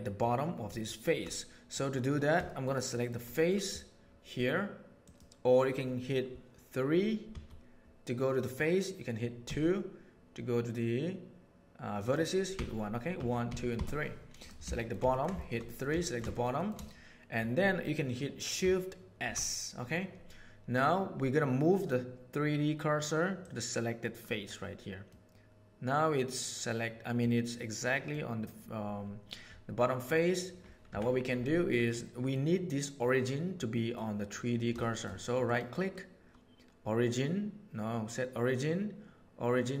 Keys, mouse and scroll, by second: 0.7 shift+middle click, 1.7 middle click, 2.4 shift+middle click, 2.8 shift+middle click, 3.3 middle click, 5.0 click, 7.2 3, 9.4 2, 12.0 click, 12.6 1, 13.1 1, 13.4 2, 13.7 3, 14.3 middle click, 14.7 shift+middle click, 15.1 ctrl+middle click, 15.3 shift+middle click, 16.0 ctrl+middle click, 16.6 middle click, 25.1-27.1 middle drag, 27.9 middle click, 29.7 middle click, 30.8 Tab, 31.8-32.2 middle drag, 33.5-33.9 middle drag, 34.8 shift+middle click, 35.4-37.6 right drag.